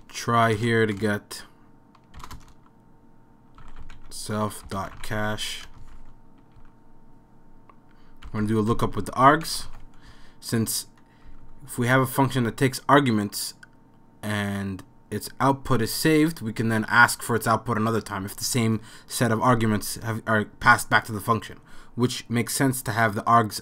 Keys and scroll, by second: 0.0-0.6 typing, 2.0-12.9 typing.